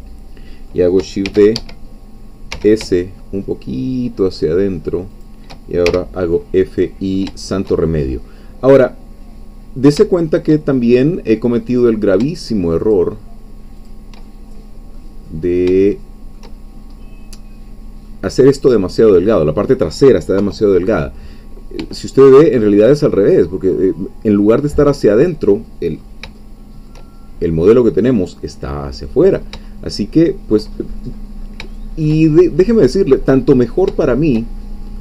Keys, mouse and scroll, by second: 1.3 shift+d, 1.5 Escape, 2.5 s, 5.1 shift+click, 5.9 shift+f, 6.4 shift+click, 6.4 middle click, 6.7 click, 7.2 shift+middle click, 7.4 shift+middle click, 7.8-8.2 shift+scroll down 2, 8.4-10.7 middle drag, 10.7-11.0 shift+scroll up 2, 11.8 click, 12.8 shift+click, 13.9 shift+click, 14.3 shift+middle click, 15.2-15.6 scroll down 2, 15.8 shift+middle click, 16.7-17.3 shift+scroll up 3, 17.3-18.0 scroll down 2, 18.0 scroll down 1, 18.1-19.2 middle drag, 19.2 scroll down 2, 20.4 3, 22.0 shift+middle click, 26.0-26.3 scroll up 2, 26.4-27.4 shift+middle drag, 28.2-29.3 middle drag, 29.3 scroll up 2, 29.7-31.1 shift+middle drag, 31.2-31.6 scroll up 2, 31.7-33.2 shift+middle drag, 33.2-33.9 scroll up 2, 34.3-35.0 shift+middle drag.